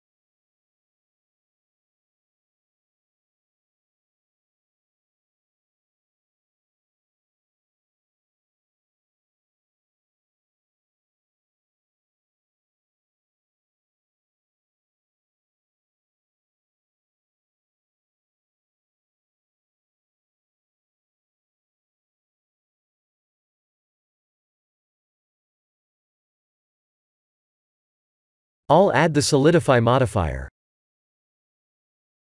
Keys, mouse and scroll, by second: 0.2 click, 0.6 shift+middle click, 1.2 3, 1.5 click, 2.8 click, 3.9 l, 5.4 g, 7.6 middle click, 9.1 KP_1, 10.1 click, 10.3 b, 11.5 g, 15.9 shift+middle click, 17.0-18.2 scroll down 3, 17.3 Tab, 18.4 click, 19.3-20.0 scroll down 3, 19.7 middle click, 21.8 click, 22.2 middle click, 22.9 shift+click, 23.5 middle click, 24.2 ctrl+j, 24.8 middle click, 26.2 click, 26.9 shift+z, 28.0-28.5 scroll up 2, 29.2 scroll up 1, 29.8 click.